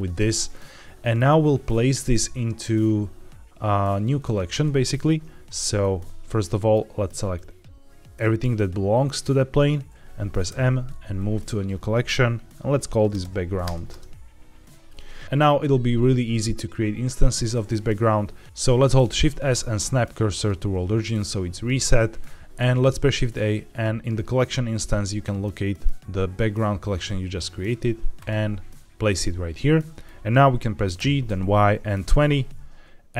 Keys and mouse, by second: 0.4-1.1 middle drag, 5.7-6.6 middle drag, 7.3-8.1 drag, 10.4 m, 13.8 Return, 14.8-15.2 middle drag, 19.0 shift+s, 22.8 shift+a, 29.6 middle drag, 30.9 g, 31.1 y, 31.9 KP_2, 32.0 KP_0.